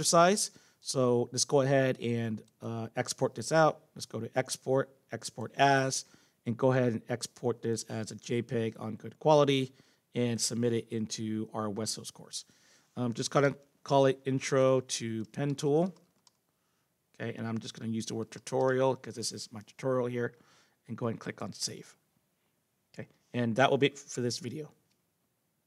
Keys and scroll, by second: 13.1-19.2 typing.